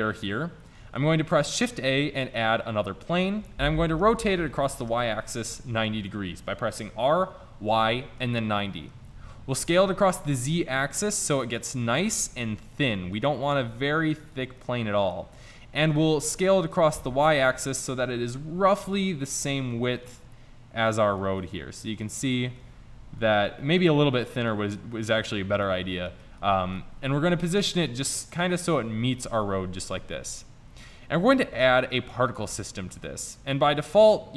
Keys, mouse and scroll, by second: 0.9 shift+a, 4.3 r, 9.6 s, 12.0 s, 13.8 s, 17.0 s, 18.1 s, 19.1-20.1 middle drag, 26.7 middle click, 27.7 middle click, 30.6-31.7 middle drag, 31.7-34.3 drag.